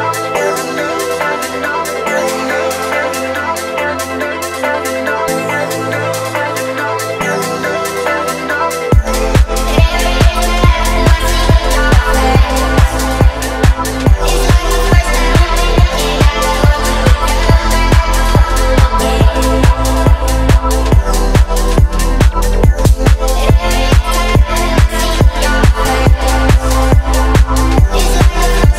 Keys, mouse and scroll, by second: 1.0 ctrl+z, 2.8 alt+shift+click, 3.7 scroll down 1, 4.4 click, 5.0 click, 5.4-6.5 scroll down 2, 7.0 drag, 7.7 click, 15.7-16.1 drag, 17.0 click, 18.1 middle click, 19.2 click, 19.8-20.5 scroll down 2, 20.5 scroll up 1, 20.7 Tab, 21.5-21.9 scroll down 1, 21.9-22.9 scroll up 3, 23.2 shift+middle click, 24.2 click, 24.6 space.